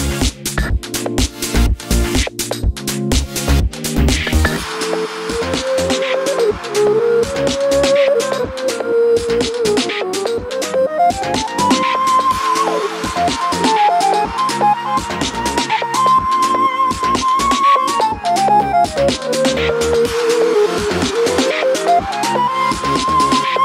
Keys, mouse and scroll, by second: 0.6-2.8 middle drag, 1.5 shift+Tab, 2.1 alt+d, 2.8 click, 2.9 s, 3.6 click, 3.9 r, 4.9 click, 5.2 g, 6.5 click, 7.0-11.8 middle drag, 8.9 scroll up 2, 10.4 g, 11.8 click, 12.0 alt+d, 14.9 click, 15.4 alt+d, 16.4 click, 16.5 r, 16.9 click, 17.1 alt+d, 22.1 click, 22.2-23.6 middle drag, 23.1 alt+d.